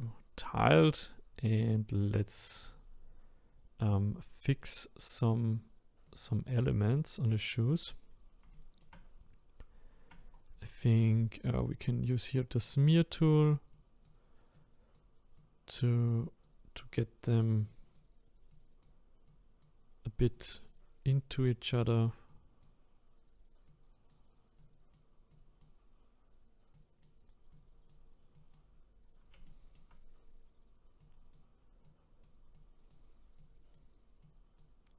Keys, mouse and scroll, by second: 7.7 click, 8.0 scroll up 5, 8.5 shift+middle click, 9.1-10.1 scroll up 3, 10.1-10.6 scroll down 1, 10.6 shift+middle click, 11.6 click, 12.0-12.6 scroll up 2, 12.6-29.0 drag, 29.0-29.4 scroll down 2, 29.4 shift+middle click, 30.0-31.0 scroll up 2, 31.0-34.9 drag.